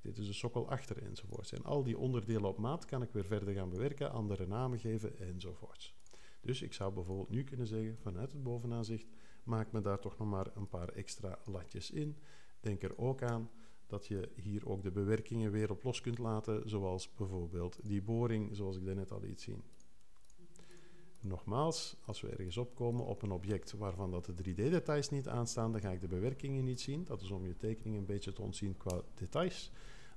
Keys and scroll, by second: 7.9 5, 14.2 alt+3.